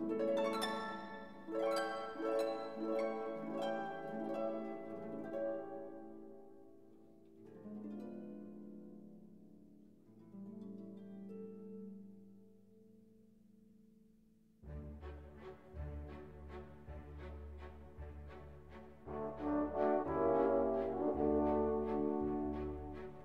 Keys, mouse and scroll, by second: 0.8 z, 1.2-2.4 ctrl+shift+middle drag, 2.4 click, 3.8-5.8 shift+middle drag, 5.8 shift+d, 8.1 scroll down 3, 8.4 g, 9.9-13.6 shift+middle drag, 13.6 click, 19.6-20.7 drag, 20.7-22.5 middle drag, 22.5 shift+d.